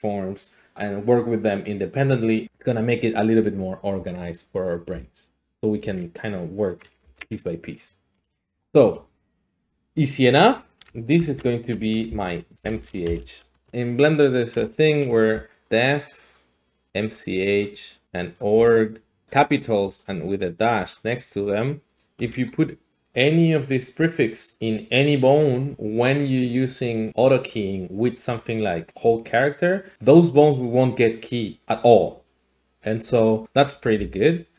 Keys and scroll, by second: 4.9-5.6 d, 6.9 ctrl+d, 7.0 ctrl+z, 11.2 F2, 12.1-13.7 typing, 13.7 Return, 15.3 d, 15.6-22.2 d, 33.9-34.5 d.